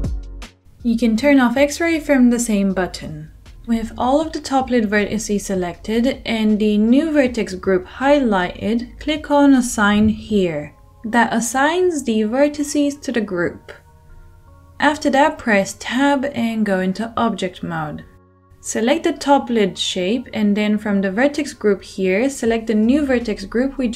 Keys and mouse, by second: 7.0-9.5 middle drag, 9.5-17.6 drag, 16.2 Tab, 17.6-20.2 middle drag, 20.2 click, 20.3-22.6 middle drag, 22.6-23.9 drag.